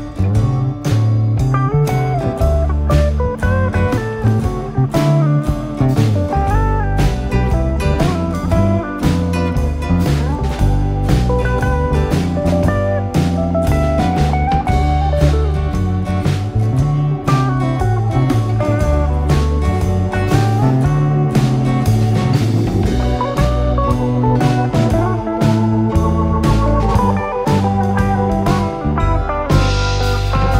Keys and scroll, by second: 6.9 Escape, 7.3 d, 9.4 ., 9.8 4, 10.2 Return, 11.1 Escape, 17.7 2, 26.3 Escape, 27.7 d.